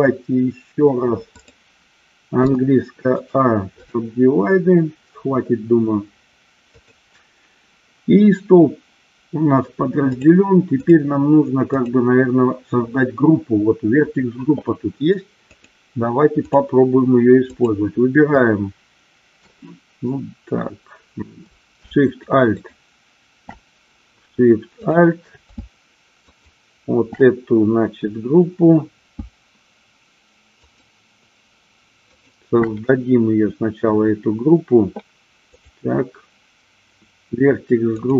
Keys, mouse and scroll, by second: 2.5 a, 3.3 right click, 10.2 click, 11.9 click, 15.7-16.7 drag, 17.7 click, 22.2 alt+shift+click, 22.6 alt+shift+click, 24.8 click, 26.5 alt+shift+click, 30.7 alt+shift+click, 32.2 alt+shift+click, 35.6 click.